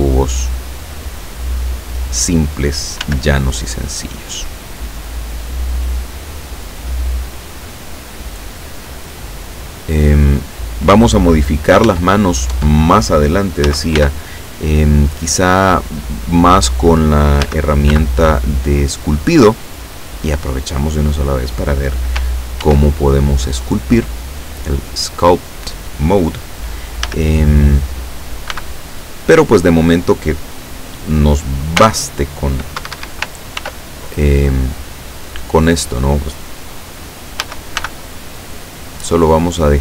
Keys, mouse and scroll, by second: 0.2-2.7 drag, 3.1 s, 5.7 click, 6.5-7.9 drag, 8.6-10.2 drag, 11.9 Tab, 13.7 a, 14.0 b, 14.9-16.1 drag, 17.5 a, 18.0 b, 18.5 click, 19.8-21.0 drag, 22.7 ctrl+r, 23.9 click, 25.4 click, 27.1 a, 28.5 b, 28.9 click, 31.8 b, 32.8 Escape, 33.6 ctrl+r, 34.3 click, 35.6 click, 37.5 a, 37.8 b, 38.5 click, 39.6-39.8 drag.